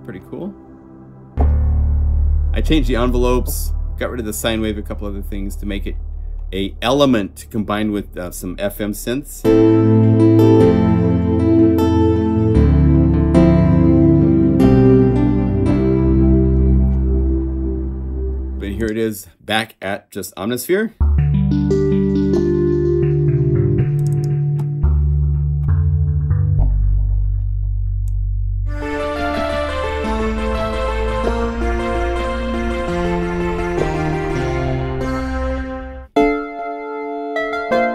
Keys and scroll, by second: 29.1 F4, 31.6 F3, 31.9 F3, 32.5 F3, 32.8 F2, 32.9 F3, 33.2 F3, 33.5 F3, 33.9 F3, 34.2 F3, 36.1 F4.